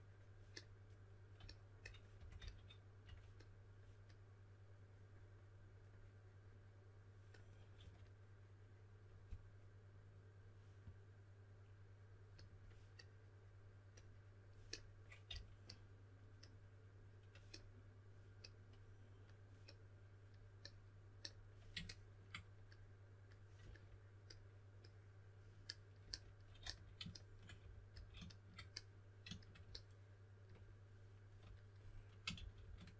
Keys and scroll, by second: 1.9-3.0 typing, 7.7 typing, 15.2 typing, 26.6 s, 27.9 typing, 32.3 typing.